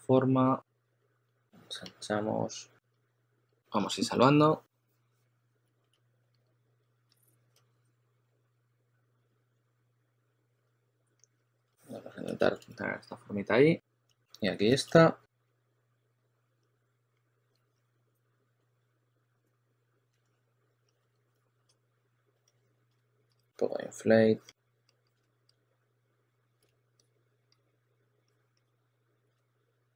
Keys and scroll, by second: 0.0-1.7 typing, 3.4 typing.